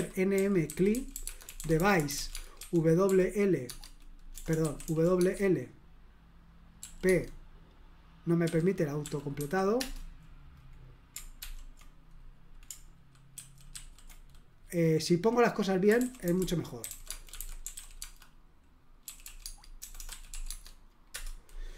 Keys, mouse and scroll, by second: 0.0-5.1 typing, 3.6 Tab, 5.2 Tab, 6.8 typing, 7.0 Tab, 8.4-9.3 typing, 9.8 Return, 11.4 ctrl+p, 13.3 ctrl+w, 13.7 ctrl+w, 15.6-20.6 typing, 21.1 Return.